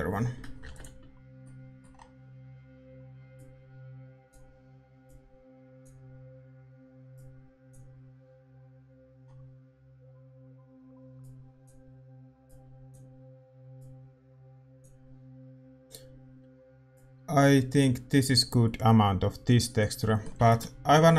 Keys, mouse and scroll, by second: 3.4 ctrl+s, 3.4-4.9 middle drag, 16.9-21.1 drag.